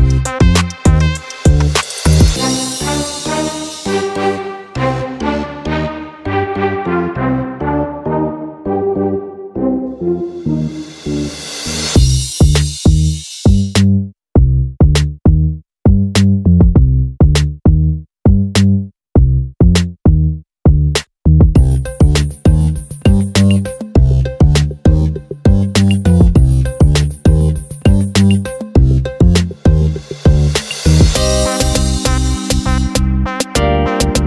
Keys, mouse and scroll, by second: 4.4 click, 5.0 click, 5.4 click, 7.3 click, 8.0 click, 8.6 click, 9.9 click, 10.6 click, 11.5 click, 12.1 click, 12.4 click, 14.6 click, 14.9 click, 15.5-22.9 drag, 23.6 click, 25.4 click, 26.0 click, 27.5 click, 28.9 click, 29.1 click, 29.7 click, 30.0 click, 30.2 click, 30.5 drag, 30.8 click, 32.4-34.2 drag.